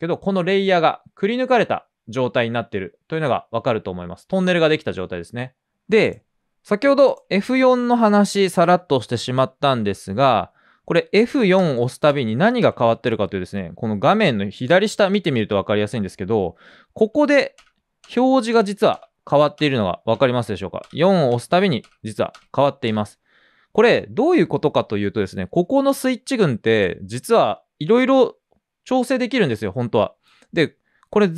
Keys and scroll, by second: 10.4 typing, 23.9 typing.